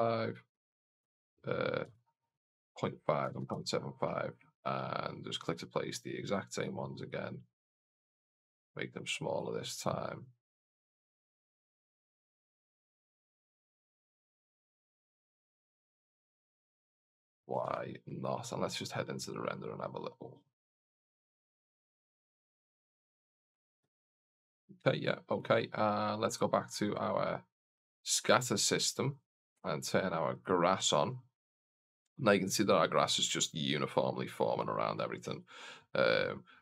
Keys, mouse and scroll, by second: 2.5-3.9 drag, 5.3 click, 6.1 click, 6.4 click, 7.4 click, 7.7 click, 8.2 click, 8.8 click, 9.6 click, 10.5 click, 11.1 click, 11.7 click, 12.7 click, 13.0 click, 13.3 click, 13.7 click, 14.2 click, 14.7 click, 15.6 click, 17.7 shift+z, 24.2 shift+z, 25.2 right click, 28.1 click, 29.2 right click, 30.3 click, 36.0-36.6 scroll down 1.